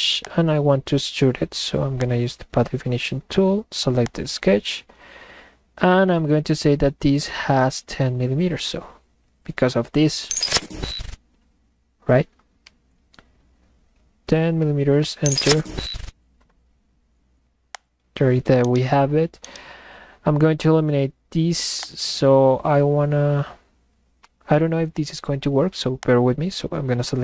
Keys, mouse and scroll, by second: 0.2 click, 2.0 click, 4.1 click, 17.7 click, 18.5-19.1 middle drag, 18.7 right drag, 19.4-19.9 middle drag, 19.5-20.1 right drag, 21.8 click, 26.0 click.